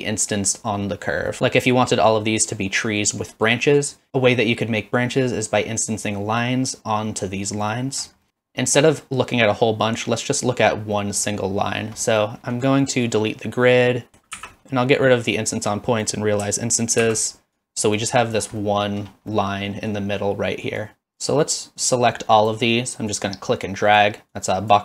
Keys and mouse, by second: 1.3 middle click, 8.3 middle click, 11.0 middle click, 12.2 middle click, 13.2-14.1 drag, 14.4 ctrl+x, 15.4 click, 17.2 ctrl+x, 17.7 click, 18.6 middle drag, 19.3-19.9 middle drag, 20.8 click, 21.4-22.6 drag, 23.3 click, 24.3-24.8 drag.